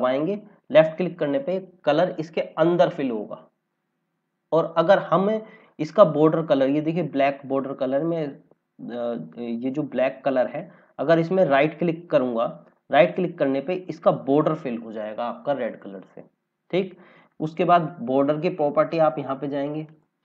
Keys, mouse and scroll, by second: 5.6 scroll up 1, 6.6 scroll up 1, 12.9 right click, 19.8 click.